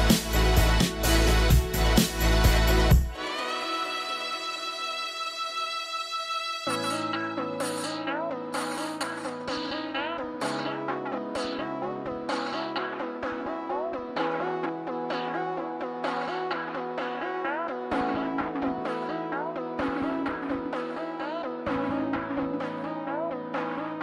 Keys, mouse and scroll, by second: 4.4 middle click, 4.7-5.4 scroll up 1, 5.5 middle click, 5.9 scroll down 1, 6.2 middle click, 6.5-7.9 scroll up 1, 8.2-10.1 scroll down 1, 13.6 scroll down 1, 22.5 middle click.